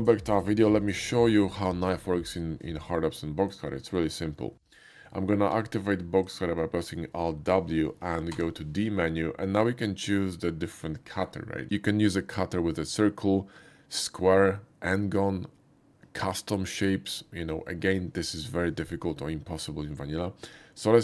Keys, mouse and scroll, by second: 1.2 middle click, 3.8 shift+middle click, 5.5 alt+w, 6.6 shift+middle click, 8.3 d, 17.1 typing.